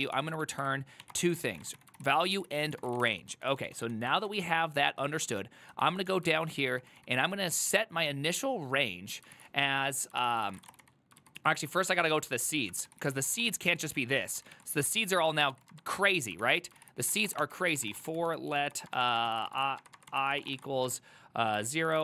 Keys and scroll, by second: 0.0-8.6 typing, 9.4 ctrl+c, 10.0-11.4 typing, 11.5 ctrl+u, 11.8 ctrl+u, 12.1 ctrl+u, 12.9 ctrl+c, 13.1 ctrl+c, 13.1-15.6 typing, 16.5 ctrl+c, 16.7-22.0 typing, 16.9 ctrl+c.